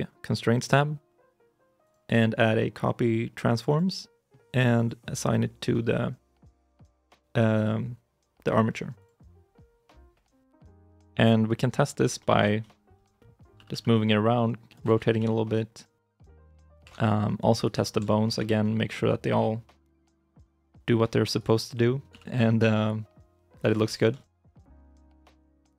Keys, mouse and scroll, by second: 12.0 shift+middle click, 12.4 scroll up 1, 12.4 middle click, 12.8-13.4 scroll down 1, 13.4 r, 14.7 ctrl+z, 15.0 g, 16.1 ctrl+z, 16.2 scroll up 1, 16.3 middle click, 16.7 ctrl+Tab, 17.4 right click, 17.7 scroll up 1, 17.9 shift+middle click, 18.2 r, 19.9 ctrl+z, 20.2 middle click, 20.5 shift+middle click, 21.1 right click, 21.9 g, 23.6 ctrl+z, 23.8 scroll down 1, 24.0 shift+middle click, 24.0-24.4 shift+scroll, 24.4 right click, 24.7 middle click, 25.2 g.